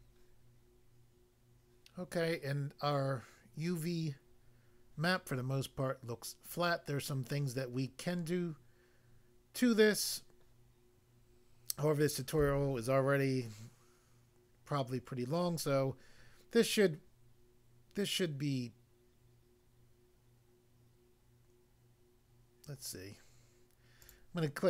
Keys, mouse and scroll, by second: 1.1 click, 24.0 click.